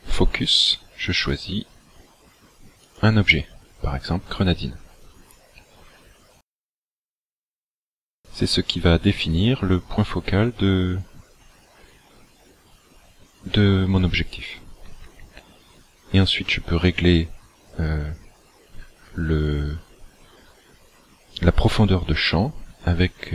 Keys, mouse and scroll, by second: 1.2 click.